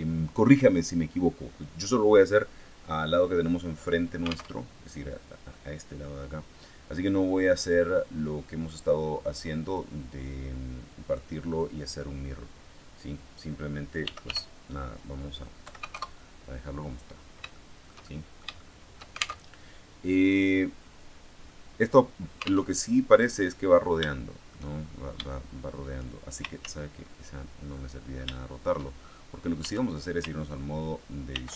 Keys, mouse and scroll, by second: 4.5 alt+Tab, 7.7-8.8 middle drag, 9.7-11.3 drag, 13.7-15.5 typing, 15.9 KP_Enter, 17.5-19.3 shift+middle drag, 19.4 alt+shift+Tab, 22.7 alt+Tab, 24.0 shift+middle click, 24.7-25.2 shift+scroll up 1, 25.2 shift+middle click, 26.5 ctrl+z, 27.7-29.4 middle drag, 29.6 shift+Tab.